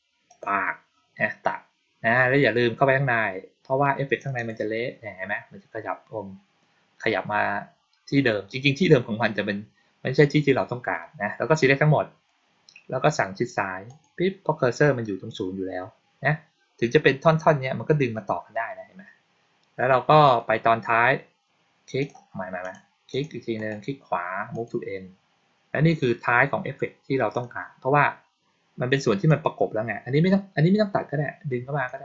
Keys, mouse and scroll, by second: 0.2 click, 4.1 click, 4.3 click, 11.5 click, 13.8 click, 20.1 click, 21.9 click, 22.5 click, 23.0 click, 23.5 right click, 24.4 click, 27.2 click, 29.2-31.8 drag.